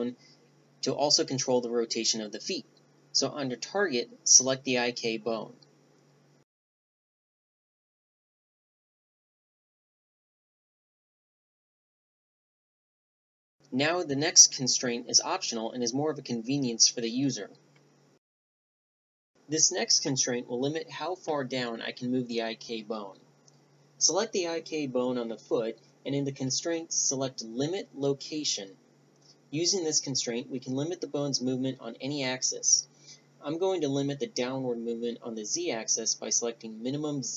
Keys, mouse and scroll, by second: 4.7-5.7 drag, 9.2-11.2 right drag, 10.5 r, 12.6-13.4 drag, 13.4 r, 16.8-19.1 middle drag, 22.5-24.5 drag, 30.3-32.2 drag.